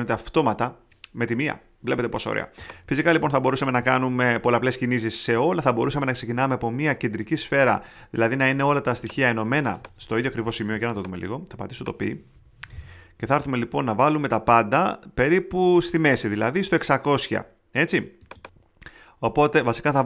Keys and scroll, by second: 3.0 super+z, 10.2 super+z, 12.3 π.